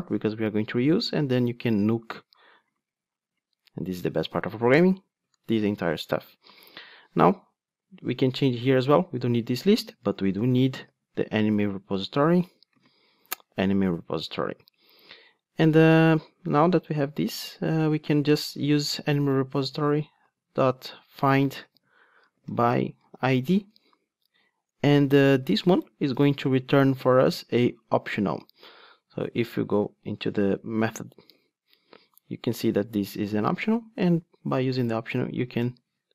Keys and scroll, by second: 0.3 super+x, 11.9 Return, 19.0 Return, 23.5 Return, 27.5 super+p, 31.2 super+b, 33.5 super+b, 33.6 ctrl+Tab.